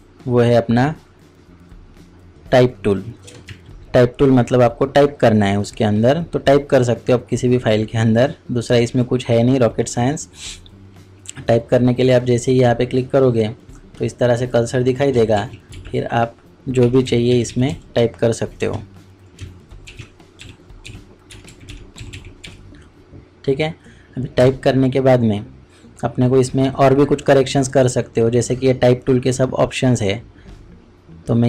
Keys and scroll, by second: 3.5 ctrl+shift+Tab, 15.1 ctrl+a, 15.1 Delete, 15.4 shift+s, 15.7 shift+a, 19.3-22.9 typing.